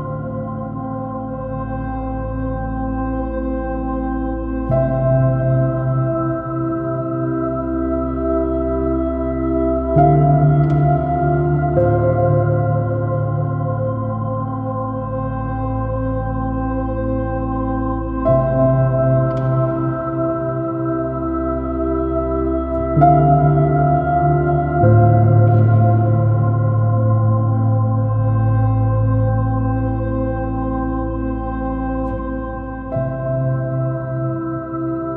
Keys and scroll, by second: 4.4 space, 9.7 space, 17.8 space, 20.7 space, 22.5 space, 24.5 space, 27.4 super+-.